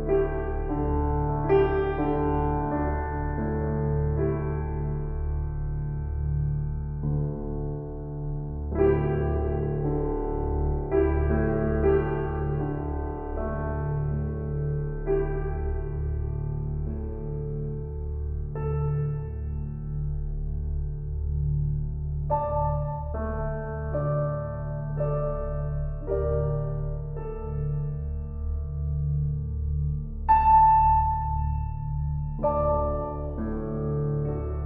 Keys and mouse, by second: 0.3 click, 3.0-3.4 typing, 4.8 click, 6.0 click, 6.7 alt+shift+click, 7.4 ctrl+alt+click, 8.8-9.2 typing, 10.5 click, 12.1 click, 15.7 click, 16.5 alt+click, 17.8-20.7 shift+drag, 24.4 click, 26.7-27.4 typing, 28.3 click, 29.6-31.4 typing, 30.4 click, 32.1-34.6 drag.